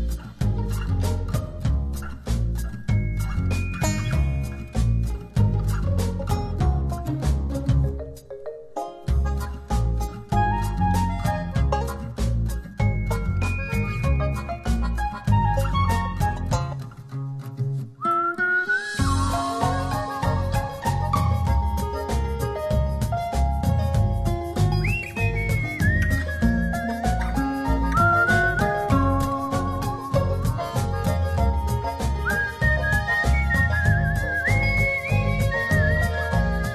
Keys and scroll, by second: 0.3 shift+Down, 2.0 shift+Up, 5.9 space, 14.5 v, 19.9 space, 24.2 space.